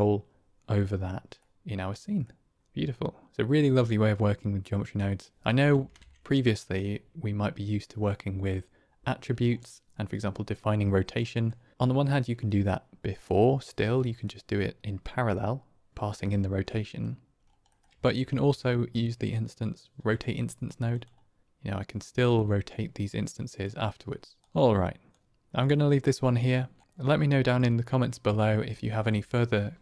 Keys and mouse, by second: 1.3-2.1 middle drag, 2.6-3.0 middle drag, 5.8 ctrl+space, 11.2 click, 13.9 click, 16.1 click, 16.2 middle click, 17.9 shift+a, 22.3-23.5 drag, 24.4 click, 24.4 x, 25.6 click, 26.8 middle click, 27.6 click, 28.2 click.